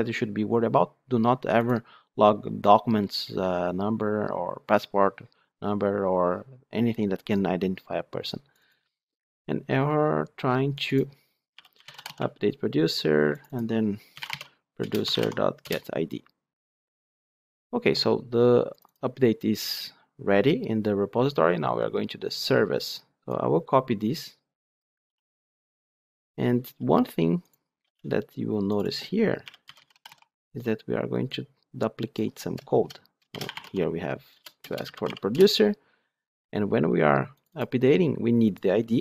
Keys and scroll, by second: 14.8 Return, 25.0 ctrl+d, 34.3 Return.